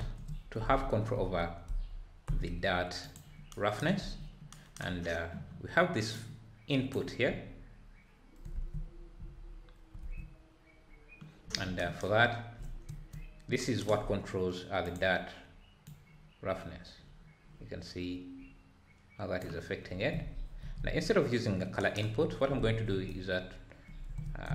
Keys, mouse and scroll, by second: 0.0 ctrl+space, 2.1 ctrl+s, 2.2 n, 6.1-15.8 drag.